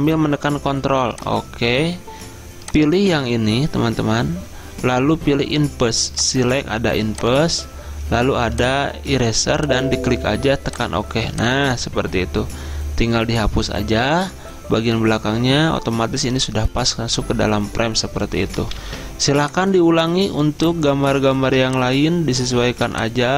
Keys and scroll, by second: 18.9 ctrl+d, 19.4 z.